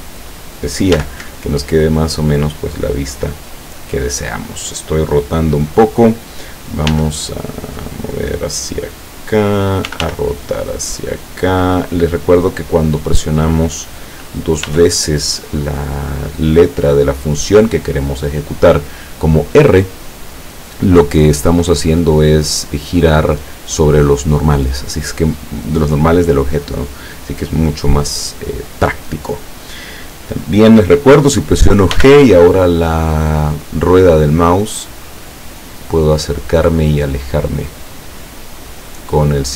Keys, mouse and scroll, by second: 0.1 right click, 1.0 g, 2.1 click, 6.9 g, 9.3 click, 9.9 r, 12.8 click, 14.7 r, 17.4 click, 32.0 g, 33.8 middle click.